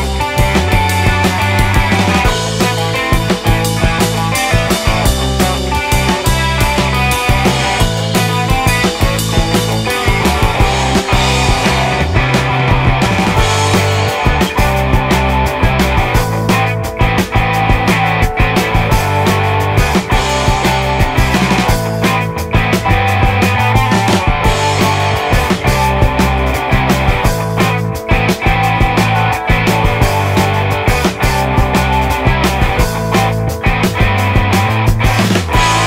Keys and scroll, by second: 0.7 ctrl+z, 2.9 space, 3.3 space, 5.7 ctrl+z, 8.4 ctrl+z, 9.9 space, 10.1 space, 12.3 ctrl+z, 13.1 space, 13.5 space, 16.5 space, 19.1 ctrl+z, 20.6 ctrl+z, 21.3 ctrl+z, 21.4 space, 21.8 ctrl+z, 28.9 ctrl+z, 29.5 ctrl+z.